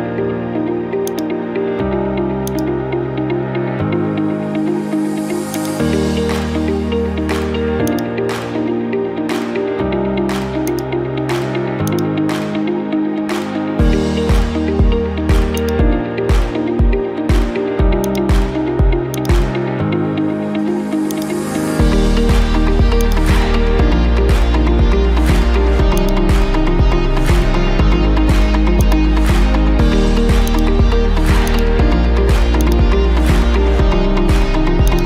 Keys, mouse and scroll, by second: 1.2-3.5 drag, 3.5 middle click, 4.5 middle click, 8.0-9.1 drag, 10.7-11.9 drag, 12.0-13.1 drag, 15.7 click, 18.1-19.2 drag, 20.0-21.2 drag, 21.9-24.2 drag, 26.0-27.2 drag, 29.0-30.1 right drag, 30.6-33.9 drag, 34.9-35.0 drag.